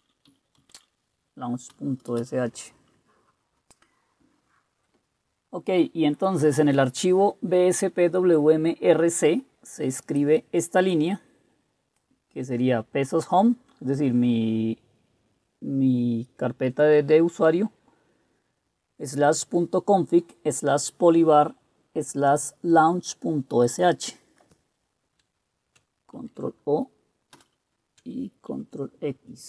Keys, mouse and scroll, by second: 0.0-1.4 typing, 2.1 Return, 2.3 Return, 26.3 ctrl+o, 27.4 Return, 28.6 ctrl+x.